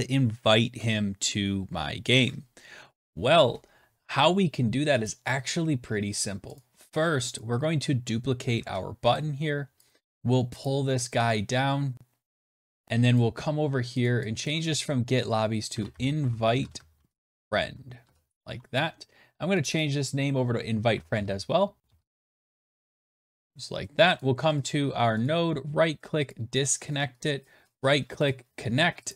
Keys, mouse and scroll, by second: 6.5 click, 7.3 click, 8.5 ctrl+d, 9.8 shift+click, 10.0 shift+click, 10.6 click, 12.5 shift+click, 13.1 click, 14.0 click, 14.4 click, 15.1 shift+click, 15.4-18.0 typing, 15.6 shift+click, 15.8 shift+click, 19.6 click, 19.7 click, 20.6-23.3 typing, 24.1 click, 25.1 middle click, 26.0 right click, 26.0 typing, 26.2 click, 27.1 right click, 28.6 click, 29.0 click.